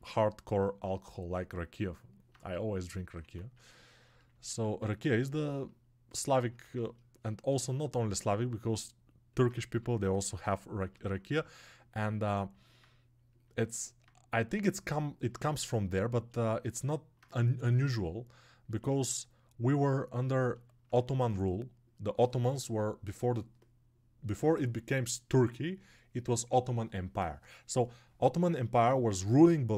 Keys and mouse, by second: 4.5 alt+q.